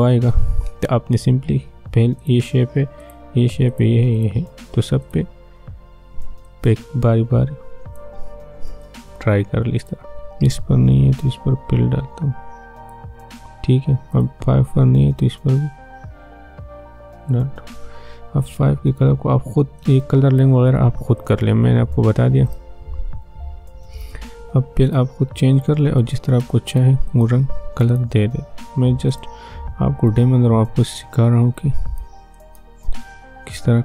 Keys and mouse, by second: 2.2-21.2 drag, 24.8 click.